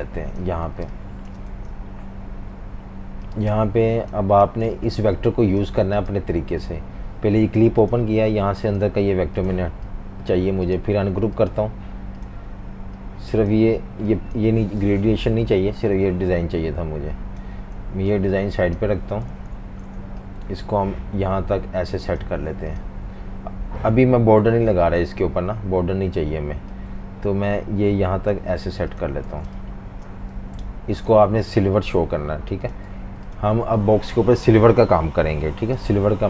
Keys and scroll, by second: 0.7 typing, 1.5 super+v, 4.4 v, 4.6 space, 15.3 Delete, 17.8 z, 18.0 z, 19.3 typing, 29.3 v, 29.4 space, 29.9 space, 31.8 i, 32.9 typing, 35.8 super+-.